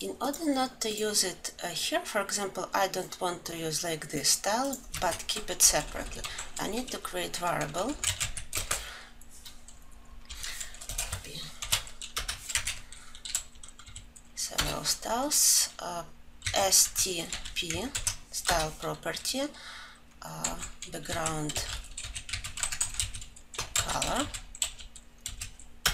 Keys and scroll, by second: 18.5 ctrl+j, 20.9 Return.